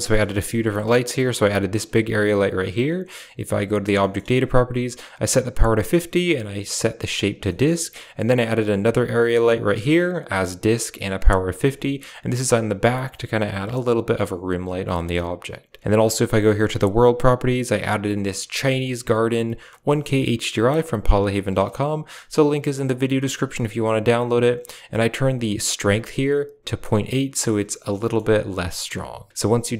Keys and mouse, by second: 0.0 shift+middle click, 0.2 middle click, 1.1 g, 3.5 drag, 3.9 shift+middle click, 6.3 click, 7.4 middle click, 9.4 middle click, 11.4 shift+middle click, 14.6 g, 16.3 click, 16.9 click, 28.0 shift+middle click.